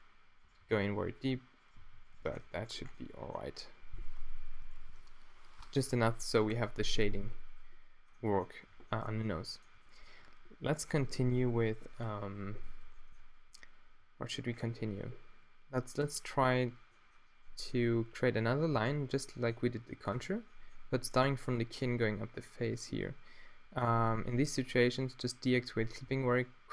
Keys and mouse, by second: 0.7 g, 1.8 g, 2.3 Tab, 2.5-3.0 middle drag, 5.0-5.6 middle drag, 20.2 Tab, 21.1-22.6 middle drag, 25.7 middle click, 26.1 e.